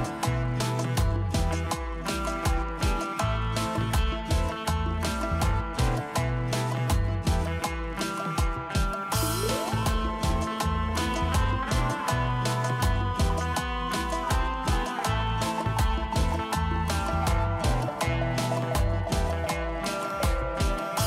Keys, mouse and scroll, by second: 7.5 scroll down 1, 12.1 scroll up 1, 13.8 double click, 15.0 ctrl+x, 16.6 Delete, 17.2 Delete, 17.4 ctrl+v, 18.1 scroll up 1, 20.0 Delete, 20.6 Delete.